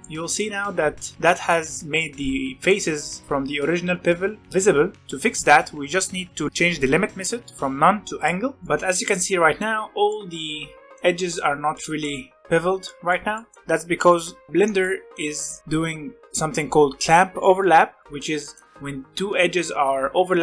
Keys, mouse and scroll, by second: 1.6-2.7 scroll up 1, 2.7-4.7 middle drag, 8.2 click, 8.6-9.7 shift+middle drag, 9.7-10.0 scroll up 1, 10.0-14.5 middle drag, 14.5 scroll down 1, 14.7-16.0 middle drag, 16.0-16.9 scroll down 1, 16.9-18.0 scroll down 1, 18.0 middle click, 18.7-20.4 scroll up 1.